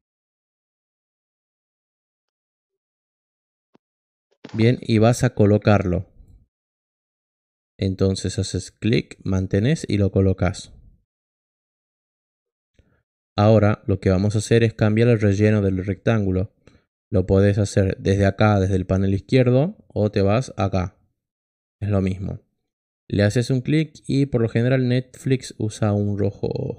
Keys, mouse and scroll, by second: 5.6 click, 7.0 click, 8.9-12.5 drag, 22.7 click.